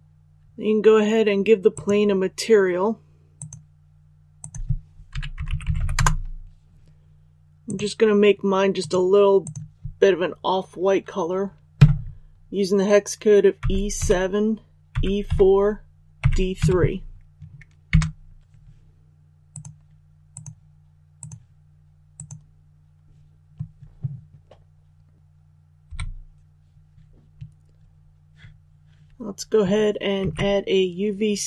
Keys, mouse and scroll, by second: 5.0-5.7 typing, 5.9 Return, 7.6 click, 13.5-16.5 typing, 19.4-23.1 drag, 25.8 KP_1, 30.1 shift+a.